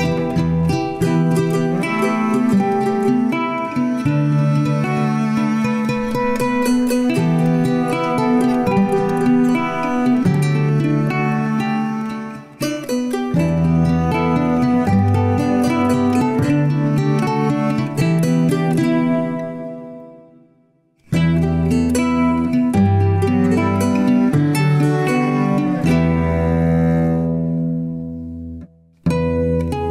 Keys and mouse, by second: 1.2-2.9 middle drag, 8.6 shift+middle click, 10.5 Tab, 11.4-11.9 shift+middle drag, 12.8-13.3 drag, 14.7 Tab, 15.2 Tab, 15.7 Tab, 17.5 click, 19.0 Tab, 19.6 Tab, 20.8 Tab, 22.5 1, 23.4 drag, 24.0 g, 26.1 shift+click, 26.7 g, 29.1 alt+z.